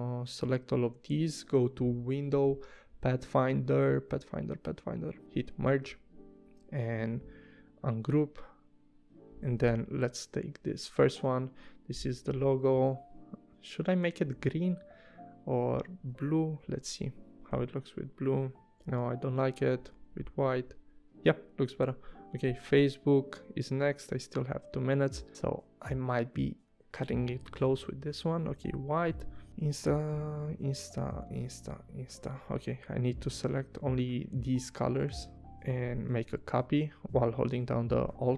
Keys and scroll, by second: 16.6 i, 17.5 v, 18.8 i, 19.9 v, 27.5 i, 28.6 v.